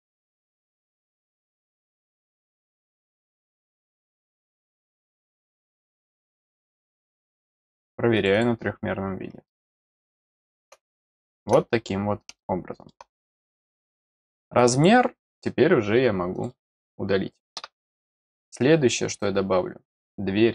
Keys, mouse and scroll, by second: 0.0 middle click, 1.3 scroll down 1, 2.3 click, 4.2 click, 5.0 click, 5.7 scroll down 1, 6.3 scroll down 1, 8.1 click, 8.3 click, 9.4-10.6 middle drag, 11.0 middle click, 12.3 middle click, 14.5 click, 15.4-16.1 scroll down 1, 16.3 click, 17.9 middle click.